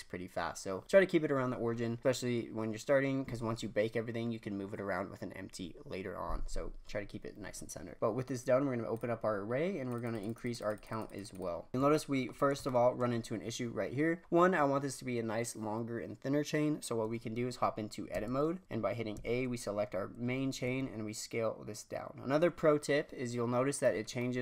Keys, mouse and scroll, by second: 8.9-11.7 drag, 11.7-13.0 scroll up 2, 13.0-13.8 scroll up 1, 14.2-14.6 scroll down 2, 18.1 Tab, 19.1 a, 20.6 s, 24.0 scroll down 1, 24.1-24.4 middle drag.